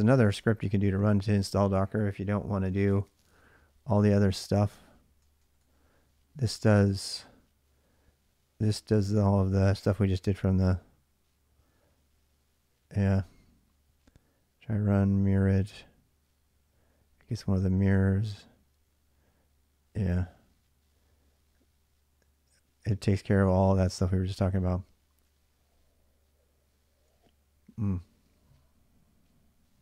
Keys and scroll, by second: 0.0-1.2 typing, 2.9-3.4 j, 4.8-11.0 typing, 12.7-20.6 typing, 23.0-23.3 j, 24.6-26.8 j, 29.4-29.8 typing.